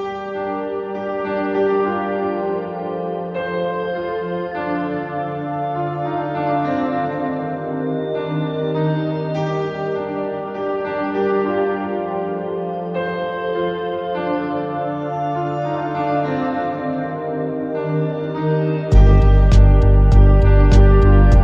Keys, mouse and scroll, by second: 0.1-1.1 shift+middle drag, 1.1-3.1 drag, 3.4 scroll up 1, 3.5 middle click, 4.0 scroll down 1, 4.2-5.8 middle drag, 5.8 click, 6.4 middle click, 7.2 a, 7.3-9.5 middle drag, 10.2-11.5 middle drag, 11.5-11.8 scroll up 2, 11.8 scroll down 2, 12.0 shift+middle click, 12.4-12.8 scroll up 2, 12.8-19.5 middle drag, 19.5 scroll down 1, 19.9-21.4 middle drag.